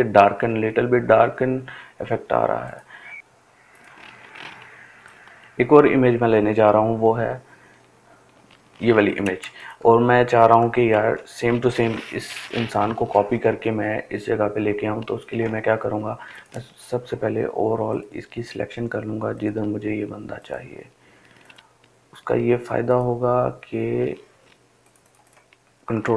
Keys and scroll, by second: 24.6 ctrl+d.